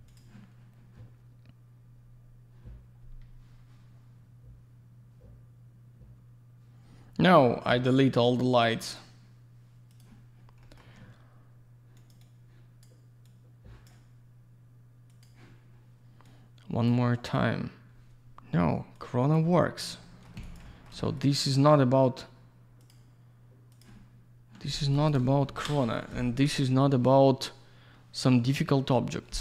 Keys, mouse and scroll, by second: 0.1 click, 0.2 click, 8.8 click, 10.2 click, 10.6 middle click, 10.8 middle click, 12.0 click, 12.1 click, 12.2 click, 13.2 click, 15.1 click, 15.2 click, 16.2 click, 18.9 click, 20.0 alt+middle click, 20.4 alt+z, 20.4 alt+click, 20.5 click, 20.8 alt+double middle click, 21.2 click, 21.3 click, 22.8 click, 22.9 click, 24.0 click, 24.9 click, 25.1 click, 25.4 ctrl+shift+Escape.